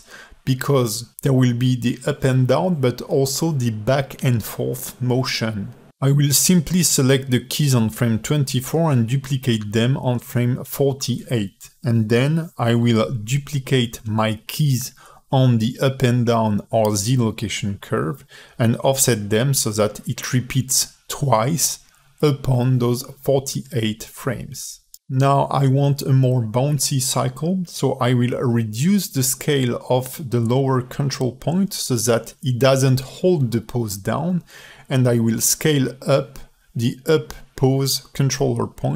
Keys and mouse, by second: 0.2 ctrl+alt+middle click, 0.9-1.3 drag, 8.6 shift+d, 11.4 Left, 12.2 ctrl+End, 13.7-15.0 drag, 15.3 shift+d, 18.5 space, 22.4 space, 22.9-23.3 drag, 23.8-24.5 shift+drag, 25.0 s, 30.2 s, 33.0 space, 34.6 space, 35.0-35.4 drag, 35.8-36.2 shift+drag, 37.1 shift+click, 38.4 ctrl+shift+z, 38.6 click.